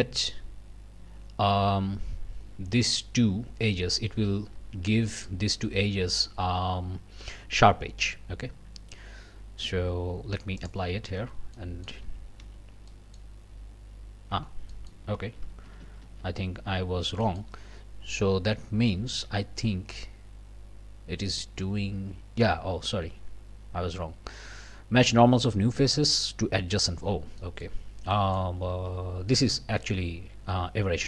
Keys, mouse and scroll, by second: 10.6 click, 11.2 Tab, 11.5 click, 12.0 a, 12.9 click, 13.4 scroll down 1, 14.3 Tab, 14.7-15.1 scroll up 1, 15.2 ctrl+z, 17.2-17.6 ctrl+scroll up 1, 27.4-28.0 scroll up 2, 28.1 middle click, 28.7 alt+a, 29.0 alt+scroll down 1, 29.3 alt+middle click, 29.8 scroll up 1, 30.8 scroll up 1.